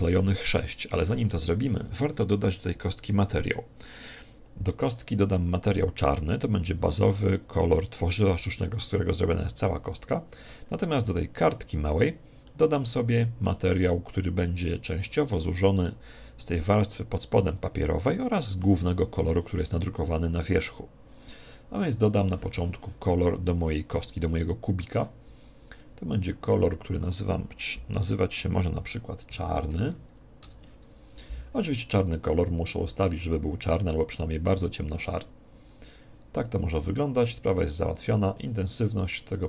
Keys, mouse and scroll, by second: 5.4 right click, 7.7-9.4 middle drag, 11.0 right click, 12.4-15.0 middle drag, 22.0 click, 23.1 right click, 25.6-28.2 drag, 32.0 click, 38.3 click.